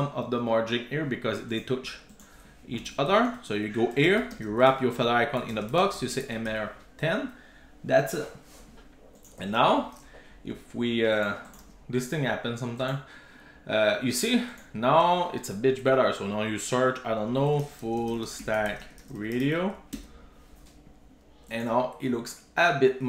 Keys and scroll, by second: 3.3 super+x, 4.3 Tab, 4.8 super+v, 6.9 super+s.